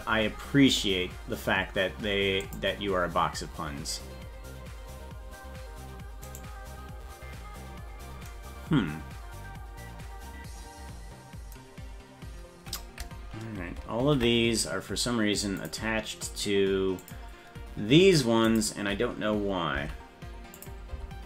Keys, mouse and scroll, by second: 2.5 click, 6.3 right click, 14.1 ctrl+l, 15.6 click, 17.0 click, 18.5 click, 19.8 Down, 20.6 click, 20.9 Down.